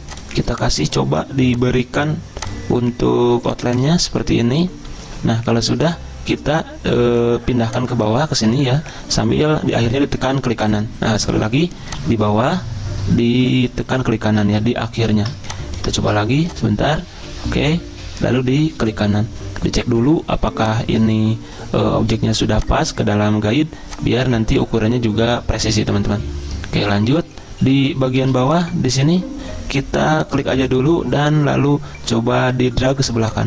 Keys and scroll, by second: 14.4 ctrl+z, 16.0 ctrl+z, 28.2 z.